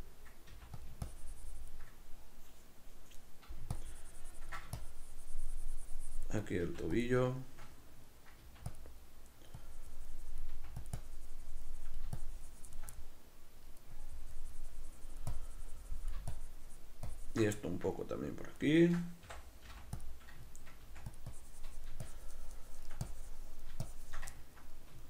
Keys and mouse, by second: 0.5 f, 1.1-7.1 ctrl+drag, 6.7 f, 7.5-8.8 shift+middle drag, 8.5 f, 8.8 click, 9.7-11.0 drag, 10.6 f, 11.0-13.0 drag, 13.0-14.0 middle drag, 14.0-17.7 drag, 17.7-20.1 ctrl+middle drag, 19.3 i, 20.1 click, 20.6 ctrl+middle click, 20.9 f, 21.4-24.4 drag, 24.4 ctrl+middle click.